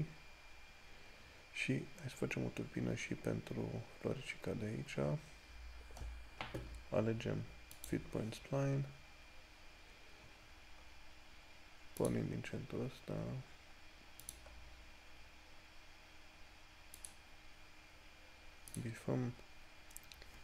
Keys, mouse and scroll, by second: 8.0 click, 10.7 scroll up 1, 14.8 click.